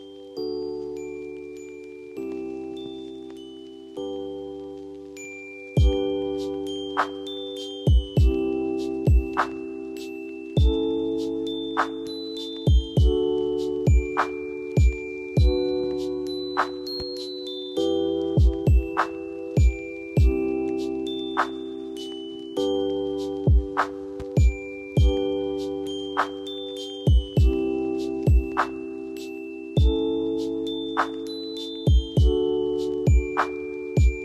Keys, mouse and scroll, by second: 13.3 click, 24.3-25.6 ctrl+drag, 25.9 ctrl+click, 26.4 space, 27.0 click, 27.5 scroll down 1, 28.5-31.0 drag, 31.0 right click, 31.8-34.2 drag.